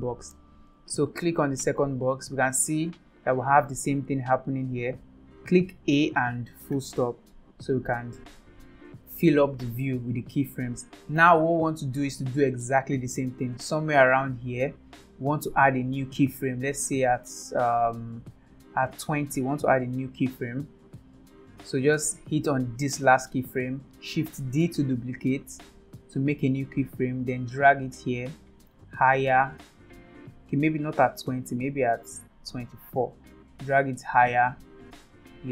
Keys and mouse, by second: 1.2 click, 5.9 a, 6.7 KP_Decimal, 13.4 click, 14.0-19.2 drag, 20.4 click, 23.0 click, 24.6 shift+d.